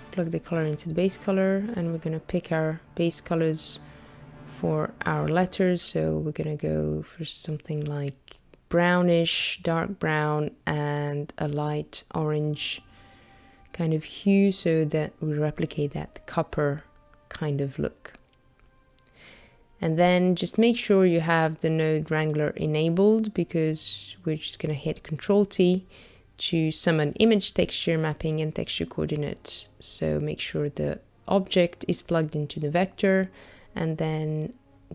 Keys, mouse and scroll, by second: 0.0 click, 1.4 click, 1.8 click, 10.8 click, 11.9 click, 23.7 middle click, 25.2 click, 26.2 ctrl+t, 28.2 middle click, 29.6 click, 30.5 middle click, 33.2 click.